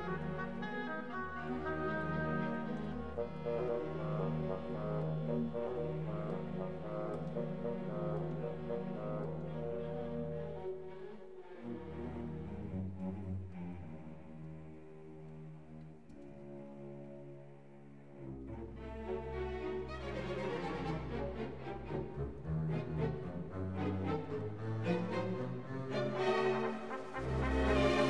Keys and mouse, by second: 2.7 Tab, 3.8 click, 4.5 shift+s, 5.8 Tab, 6.2 click, 13.2 click, 17.9 shift+a, 20.9-21.9 drag, 22.3-23.6 drag, 26.8 r, 27.0 y, 27.4 KP_9, 27.4 KP_0, 27.9 KP_Enter.